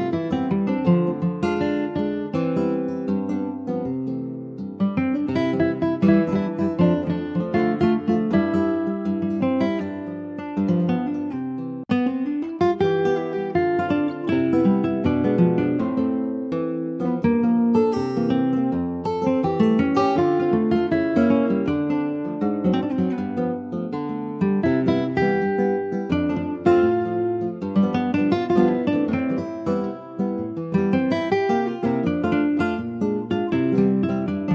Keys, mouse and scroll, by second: 4.3 scroll down 2, 4.5 middle click, 5.0 Tab, 5.5-6.1 scroll down 2, 6.1 middle click, 6.6 ctrl+s, 6.7 click, 7.0 scroll down 3, 7.3-8.7 middle drag, 8.7-9.1 scroll up 1, 9.1 ctrl+s, 9.2 click, 9.6 middle click, 9.9-10.3 scroll up 3, 10.3 Tab, 10.7-12.4 middle drag, 12.4 Tab, 12.8 scroll down 3, 13.4 click, 13.8-14.9 middle drag, 14.9 ctrl+s, 15.0 click, 15.3-16.0 scroll up 6, 15.6 shift+middle click, 16.0 Tab, 16.5 click, 16.7 middle click, 17.5 scroll up 2, 17.9 click, 18.1 middle click, 18.5 3, 18.7 click, 19.1 middle click, 19.9 i, 22.7-24.7 middle drag, 24.7 e, 27.1 middle click, 27.9 click, 28.7 scroll down 2, 29.0-30.0 middle drag, 30.0 scroll down 4, 30.3 middle click, 30.8 Tab, 31.0 click, 31.3 middle click, 31.6 scroll up 1, 31.9 ctrl+s, 32.1 middle click, 32.8 scroll down 2, 33.1 middle click, 33.5 ctrl+s, 33.8 shift+middle click, 34.2 click.